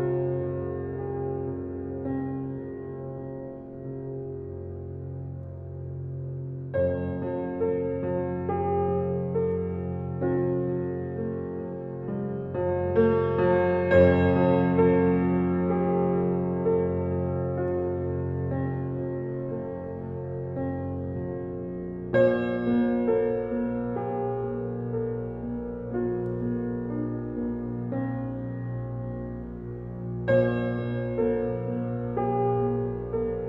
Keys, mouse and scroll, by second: 5.4 alt+right click, 6.3 space, 6.5 click, 6.9 space, 7.7-9.1 drag, 9.1 ctrl+alt+scroll down 1, 12.0 ctrl+click, 15.0 ctrl+d, 15.5 alt+right click, 16.2 x, 17.1-21.7 drag, 24.7 ctrl+click, 26.9 ctrl+click, 29.3 ctrl+click.